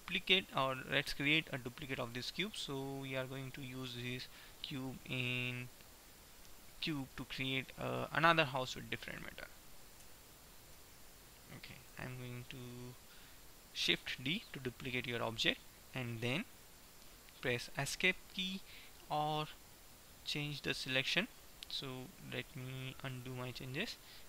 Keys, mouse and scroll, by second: 1.3 middle click, 10.2 Tab, 11.2 Tab, 11.8 KP_1, 14.5 shift+d, 23.3 ctrl+z.